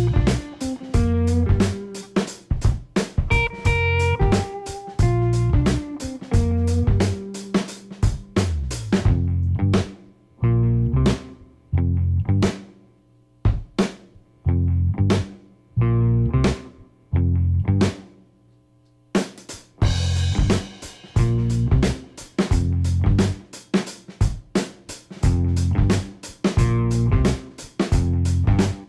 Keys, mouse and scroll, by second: 1.2 click, 2.3 click, 3.6 click, 5.9 Left, 6.6-7.5 typing, 7.8 Return, 8.9 Return, 11.9 click, 17.1 click, 18.7 click, 20.5 click, 22.5 click, 24.0 click, 25.3 click, 26.6-28.8 drag.